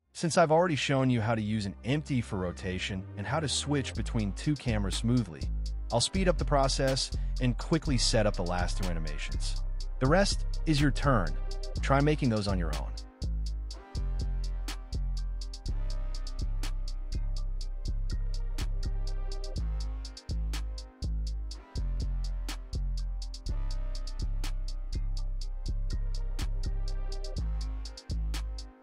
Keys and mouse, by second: 0.0 click, 0.1 click, 0.4-6.5 typing, 0.9 click, 1.4 click, 2.9 click, 2.9 right click, 6.0 click, 6.8 F2, 7.2-7.5 drag, 7.5 F2, 7.9 click, 8.1 click, 8.6 click, 8.6 KP_0, 8.8 shift+click, 9.7 i, 10.1 click, 10.5 middle click, 10.6 click, 11.0 ctrl+b, 11.4 click, 11.8 KP_0, 12.1 r, 12.1 z, 12.8 click, 13.1 click, 13.4-14.9 typing, 14.5 click, 15.1 click, 16.3 middle click, 16.5-21.6 typing, 17.2 click, 19.8 click, 22.4 click, 23.0 middle click, 23.1 ctrl+b, 23.4-26.8 typing, 24.2 F2, 25.2 middle click, 25.5 ctrl+p, 26.6 click, 26.9 click, 27.8 space, 28.6 space.